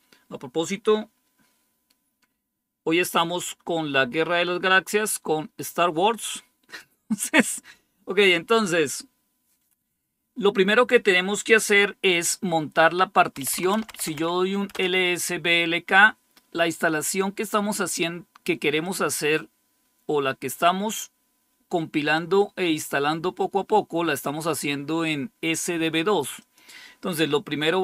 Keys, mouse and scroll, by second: 13.1-14.5 typing, 14.6 Return, 18.7-22.9 drag, 26.3-27.8 drag.